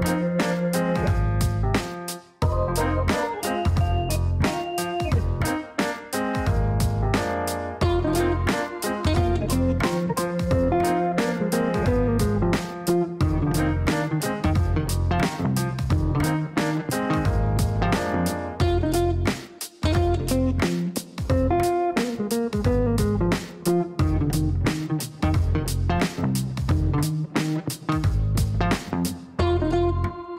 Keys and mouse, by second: 0.0-4.0 typing, 5.1 click, 5.3 click, 5.4 click, 7.5 KP_4, 7.6 KP_5, 10.2 click, 19.3 click, 26.3 click, 27.8 click.